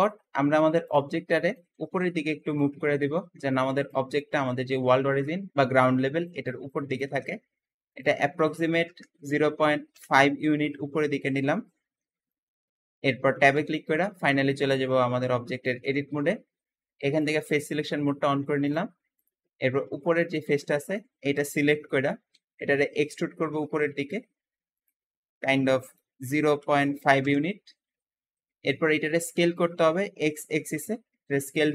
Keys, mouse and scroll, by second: 0.8 shift+click, 1.1 scroll down 1, 1.4-2.5 shift+middle drag, 2.5 click, 4.1-7.2 middle drag, 7.2 Escape, 7.8-10.8 drag, 8.8 KP_0, 9.2 ., 9.4 5, 9.8 Return, 11.0-12.6 middle drag, 12.6-13.4 scroll up 2, 13.4 Tab, 14.3 middle click, 15.1-15.6 scroll down 2, 15.6-17.1 shift+middle drag, 17.1-18.7 shift+drag, 19.0 click, 20.1-22.2 middle drag, 22.2 e, 25.7-28.1 drag, 26.2-27.3 typing, 28.1-29.6 middle drag, 29.6 s, 29.9 x, 30.0 x.